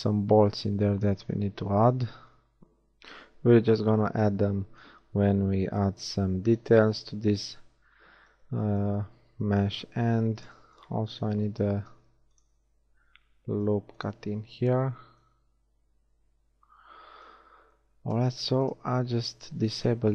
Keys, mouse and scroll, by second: 1.5 z, 5.9 KP_1, 7.5 z, 8.0 z, 11.5 ctrl+r, 12.3 click, 14.5 Tab, 17.6 Tab.